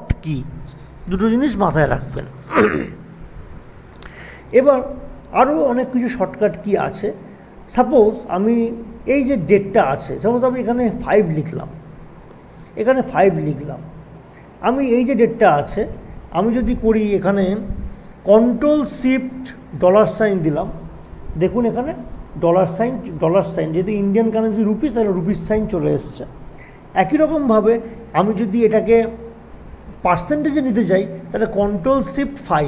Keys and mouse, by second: 3.6 click, 11.0 click, 12.3 5, 13.8 click, 18.3 click, 22.7 click, 25.0 click, 31.3 click, 32.5 ctrl+shift+5.